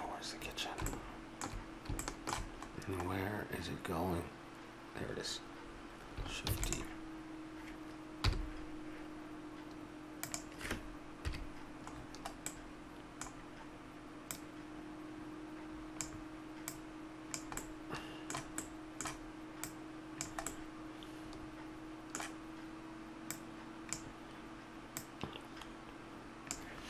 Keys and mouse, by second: 6.5 shift+d, 8.2 g, 11.2 KP_Decimal, 11.9-13.0 middle drag, 17.6-19.7 middle drag, 19.7 click, 20.5-21.6 middle drag.